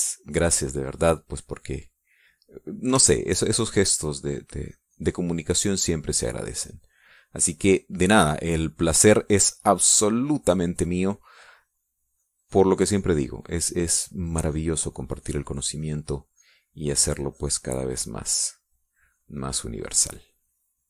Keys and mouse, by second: 0.6 middle click, 1.3 middle click, 1.5 click, 3.9 shift+click, 4.3-9.2 shift+drag, 12.5-20.8 drag.